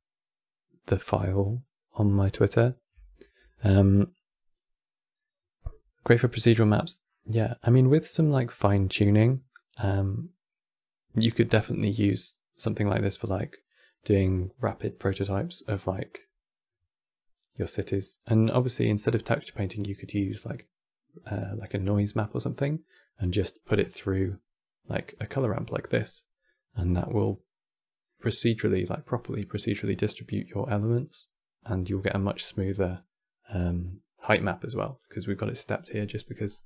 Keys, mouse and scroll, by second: 23.1 middle click, 23.5-24.6 scroll up 21, 24.6 click, 36.2 scroll down 4.